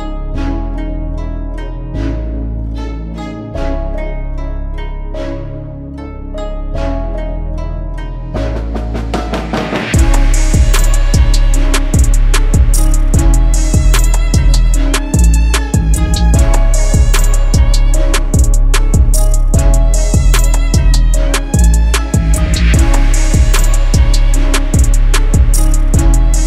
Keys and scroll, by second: 3.2 space, 4.4 F2, 9.4-10.3 typing, 12.7 space, 12.9 F3, 13.3 Escape, 14.1 F3, 14.4 F2, 16.9 ctrl+z, 18.6 ctrl+z.